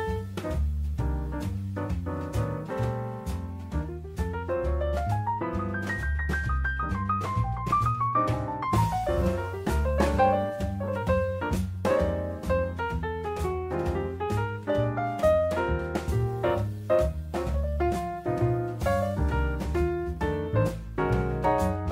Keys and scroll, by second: 6.4 3, 6.7 Return, 11.2 4, 11.5 Return, 14.3 Escape, 18.6 Escape.